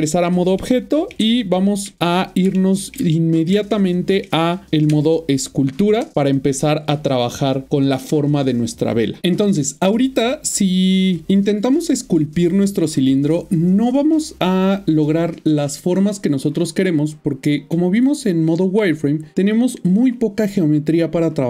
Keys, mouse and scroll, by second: 0.6 middle click, 1.7-2.4 typing, 2.5 shift+middle click, 3.7 ctrl+middle click, 4.9-6.0 Tab, 18.2 typing, 19.0 middle click.